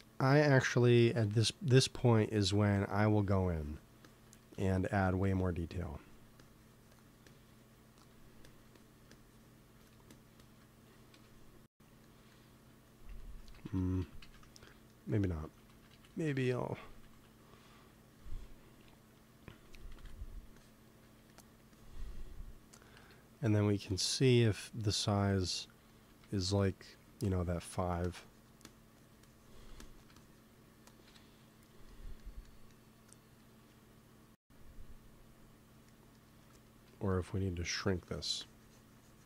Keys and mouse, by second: 2.3-12.0 drag, 11.0 KP_1, 13.5 ctrl+z, 13.7 ctrl+z, 14.0 ctrl+z, 14.2 ctrl+z, 15.4 ctrl+z, 15.7 ctrl+z, 15.9-16.4 ctrl+z, 16.6 ctrl+z, 16.9 ctrl+z, 17.1 ctrl+z, 18.0-19.8 drag, 20.5-21.8 drag, 20.8 f, 21.9 click, 22.2 click, 22.9 click, 22.9 KP_1, 23.8 click, 24.4 f, 26.2 f, 26.4-31.8 drag, 30.9 KP_1, 31.8 middle click, 37.8-39.2 drag.